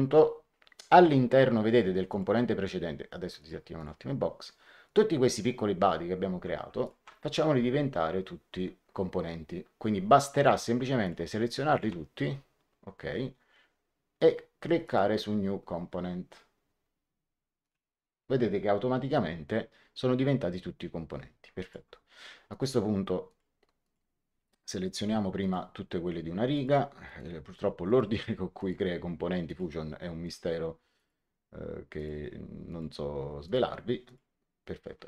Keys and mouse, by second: 2.0 click, 3.3 click, 4.8 click, 6.8 shift+click, 10.3 click, 11.6 shift+click, 14.8 click, 17.5 click, 21.5 click, 22.4 click, 25.3 click, 26.4 ctrl+click.